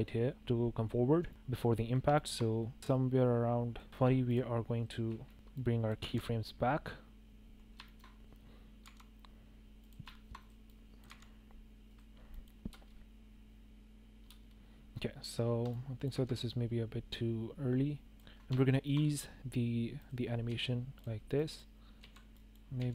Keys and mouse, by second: 0.3 shift+drag, 1.9-3.3 drag, 3.8 shift+drag, 5.0-5.3 shift+drag, 6.1 drag, 6.4 g, 8.8 g, 10.1 shift+click, 10.3 click, 10.6-11.0 drag, 11.0 g, 12.3 click, 12.7 space, 14.2 space, 15.7-16.0 drag, 16.1 g, 18.0 click, 18.6 shift+click, 20.0 click, 20.5 s, 20.9 drag, 21.3 drag, 22.0 s, 22.3 space, 22.4 click, 22.7 s.